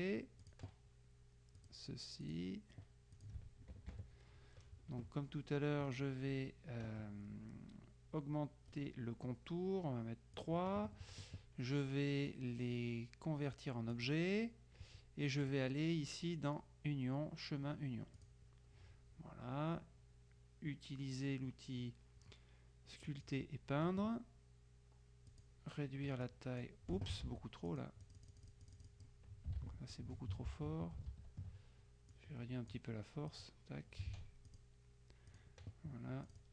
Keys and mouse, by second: 0.5 click, 1.6 click, 3.2 click, 4.0 KP_Subtract, 8.8 right click, 10.5 click, 14.0 click, 15.6 click, 18.2 click, 23.2 click, 25.4 click, 26.3 click, 27.3 ctrl+z, 27.8-29.6 ctrl+drag, 29.6 z, 30.6 z, 32.2-34.0 drag, 34.2 ctrl+z, 34.6 ctrl+click, 35.4 click, 36.4 click.